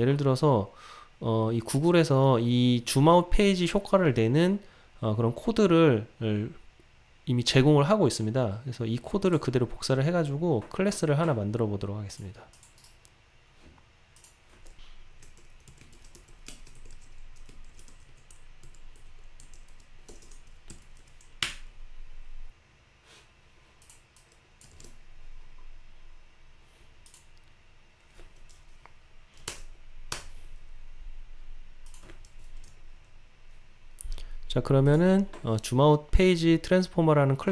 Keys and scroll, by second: 24.8 super+v, 32.7 alt+Return.